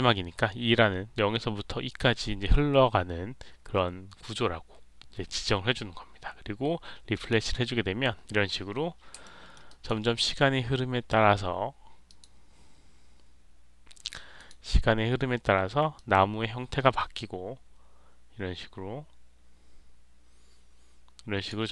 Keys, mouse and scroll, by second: 7.0 click, 8.5-9.4 scroll up 3, 9.1 alt+middle click, 9.6 alt+right click, 9.9 alt+middle click, 10.1 alt+scroll up 1, 12.0 click, 14.3 click, 15.9-21.4 drag.